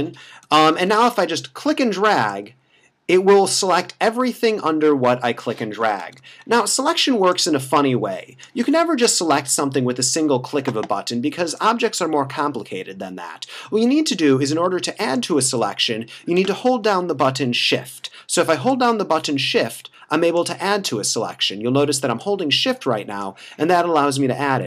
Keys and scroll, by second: 0.5 [, 6.0 [, 9.0 [, 17.7 [.